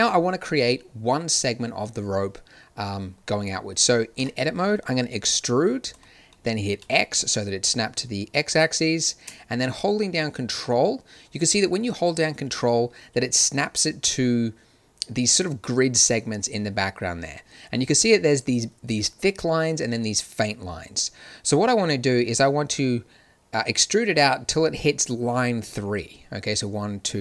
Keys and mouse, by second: 4.1 Tab, 5.9 e.